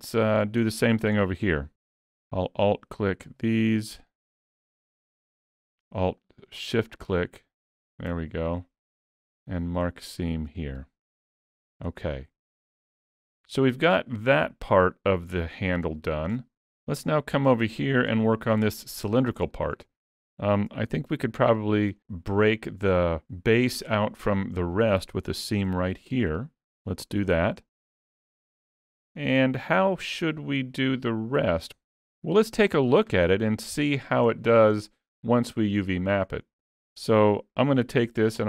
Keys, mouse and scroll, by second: 0.1 shift+middle click, 0.4 scroll up 2, 0.7 shift+middle click, 1.3 middle click, 2.5 alt+click, 3.3 alt+shift+click, 8.2 middle click, 9.2 ctrl+e, 11.5 alt+a, 11.7-13.3 scroll down 2, 12.1 middle click, 16.0 shift+middle click, 16.8 middle click, 17.7 shift+middle click, 18.2 middle click, 18.8 shift+middle click, 19.1 middle click, 19.6 shift+middle click, 19.9-20.4 scroll up 2, 20.4 shift+middle click, 21.6 alt+click, 24.6 middle click, 25.7 ctrl+e, 27.3 alt+a, 27.7 middle click, 30.8-31.5 scroll down 5, 33.2 shift+middle click, 33.8 middle click, 34.4 shift+middle click, 34.8-35.2 scroll down 1, 35.2 middle click, 36.0 middle click.